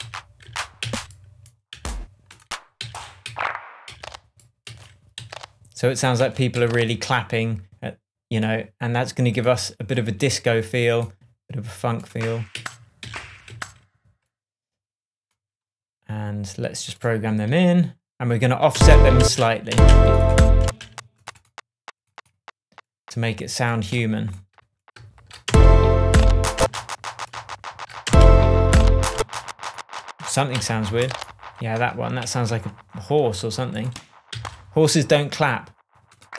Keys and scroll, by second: 0.4 Down, 5.1 Up, 6.1 Down, 6.5 Up, 12.5 Down, 13.0 Up, 13.4 Down, 18.7 space, 25.4 super+space, 26.3 space, 27.3 super+space, 28.0 super+space, 28.9 space, 30.5 p, 31.7 BackSpace, 32.3 shift+BackSpace, 32.4 shift+Tab, 34.3 Down.